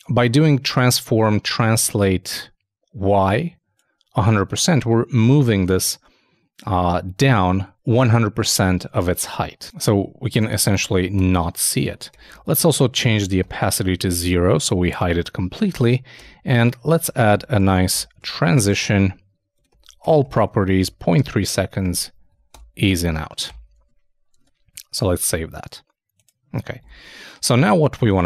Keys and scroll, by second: 4.4 super+Tab, 17.9-18.8 typing, 23.6 super+;, 23.7 super+s, 24.4 super+Tab.